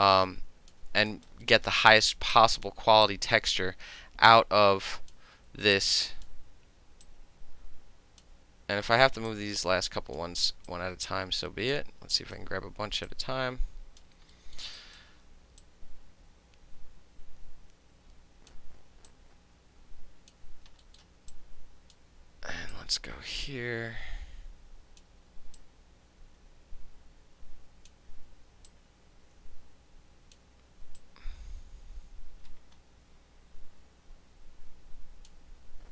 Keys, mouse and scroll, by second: 0.7 alt+middle click, 1.1 alt+click, 1.3 alt+middle click, 1.6-2.3 alt+middle drag, 2.3-2.7 drag, 2.7-3.1 middle drag, 3.1-5.1 drag, 5.1-5.8 middle drag, 5.8-6.3 drag, 6.3 middle click, 7.1-8.2 drag, 8.2-9.3 middle drag, 9.3-10.2 drag, 10.2-10.7 middle drag, 10.7-11.7 drag, 11.7-12.1 alt+middle drag, 12.1 alt+right click, 12.3-13.1 alt+middle drag, 13.1 click, 14.0 middle click, 14.3 alt+middle click, 14.8 alt+right click, 15.6-18.5 drag, 19.1-20.3 drag, 20.8 alt+middle click, 21.3-21.9 drag, 22.7-25.0 drag, 25.6-27.9 drag, 28.7-30.4 drag, 30.4-31.0 middle drag, 31.0-35.3 drag, 35.3-35.9 middle drag.